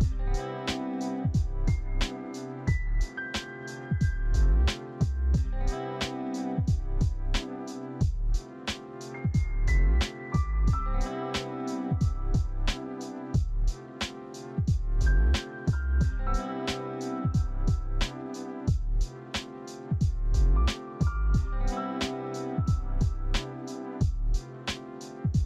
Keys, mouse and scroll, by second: 0.6 ctrl+c, 0.7 ctrl+v, 1.6 Return.